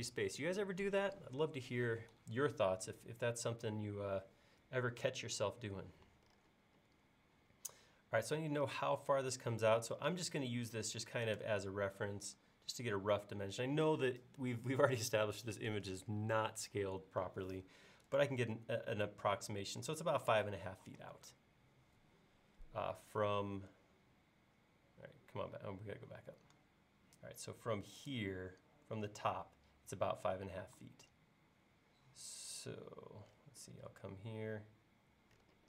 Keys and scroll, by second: 9.4 l, 20.9 l, 30.5 l.